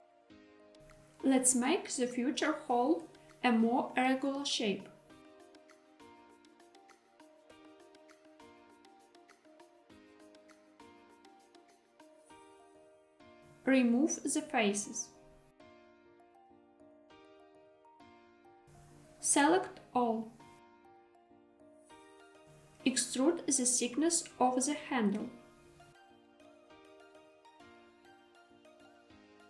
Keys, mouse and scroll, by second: 1.2 click, 2.4 shift+click, 2.9 s, 3.1 y, 6.8 click, 7.8 click, 8.8 shift+click, 10.0 s, 11.8 click, 13.7 3, 15.1 click, 16.0 x, 18.8 a, 20.7 middle click, 21.9 shift+middle click, 22.6 e.